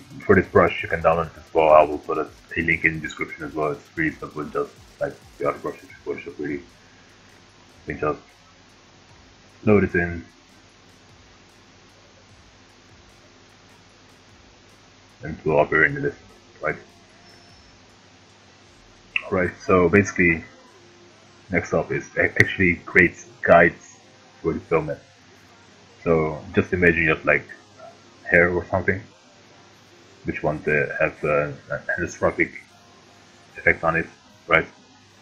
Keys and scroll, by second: 18.5 ctrl+z.